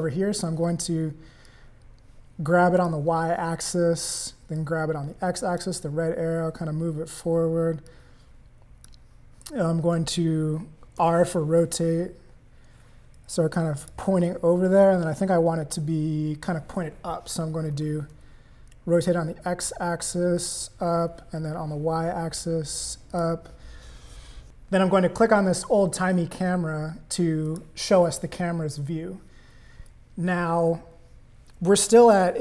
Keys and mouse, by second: 1.5-2.9 drag, 4.6-5.6 drag, 7.8-8.8 drag, 11.1 r, 17.7 r, 21.1 r, 27.5 click.